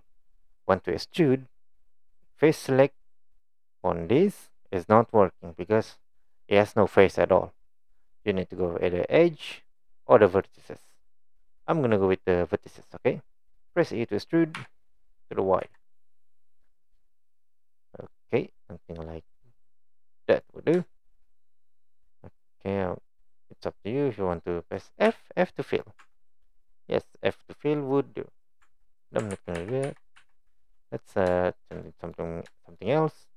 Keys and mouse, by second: 9.4 click, 10.4 click, 14.6 e, 20.9 shift+middle click, 21.8 middle click, 25.1 f, 25.7 click, 26.0 Tab, 26.7 click, 27.1-27.8 middle drag, 28.6 Tab, 29.4 ctrl+z, 29.6 ctrl+z, 29.8 ctrl+z, 30.2 ctrl+z, 30.7 middle click, 31.5 shift+middle click, 31.9 middle click, 32.6 shift+middle click.